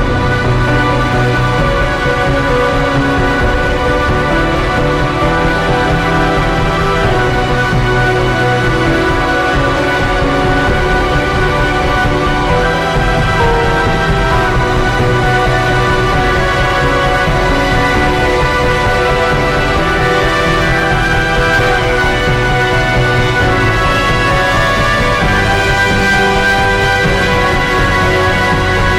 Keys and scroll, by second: 2.8 ctrl+t, 4.9 ctrl+i, 5.4 b, 6.6 [, 7.8 space, 11.5 x, 16.2 ctrl+z, 16.3 x, 16.7 [, 17.9 ], 19.1 x, 22.1 ctrl+g, 22.6 a, 22.9 s, 26.6 ctrl+0, 28.1 ctrl+d, 28.4 ctrl+g, 28.8 r.